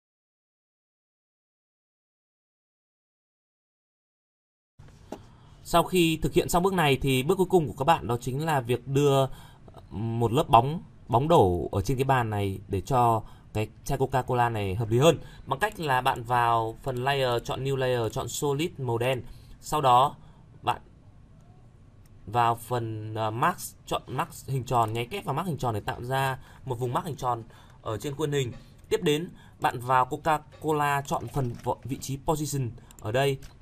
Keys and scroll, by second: 31.5 ctrl+c.